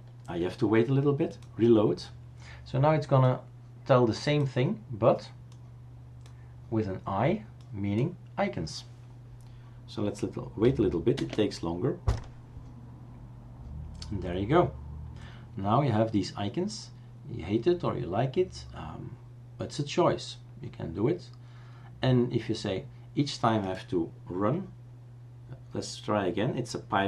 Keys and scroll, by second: 11.1 super+space.